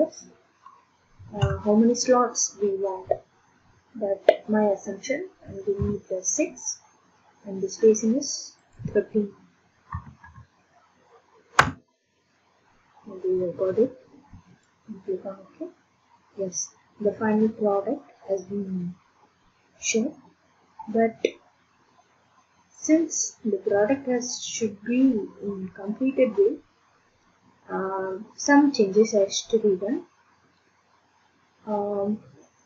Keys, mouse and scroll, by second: 1.4 BackSpace, 5.8 6, 8.7 click, 9.9 typing, 11.6 Return, 15.0-19.7 drag, 20.7-22.3 middle drag, 22.6 middle click, 23.3 middle click, 24.8 middle click, 26.0-27.1 middle drag, 27.6-31.2 middle drag.